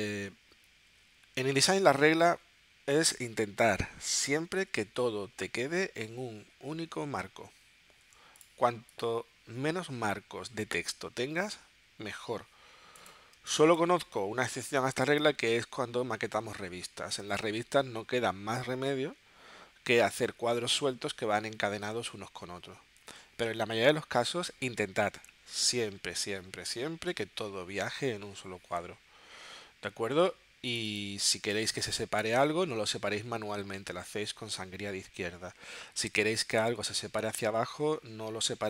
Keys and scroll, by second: 4.7 super+z, 13.4 space.